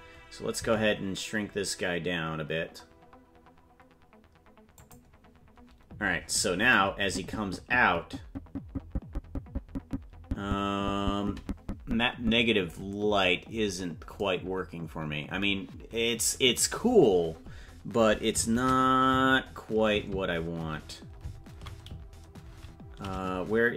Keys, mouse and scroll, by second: 0.9 s, 7.2-13.0 drag, 18.9 shift+`.